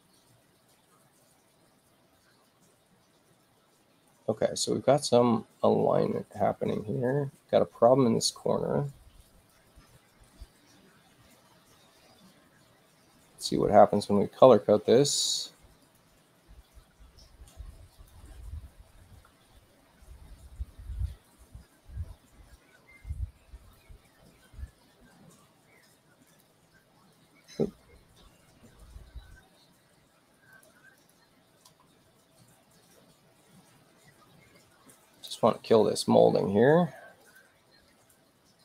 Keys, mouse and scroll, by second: 15.8 click, 17.9 click, 25.1 space, 26.3 click, 27.4 space, 29.7 space, 30.5 click, 31.0 click, 35.1 click, 37.2 click, 37.8 Return.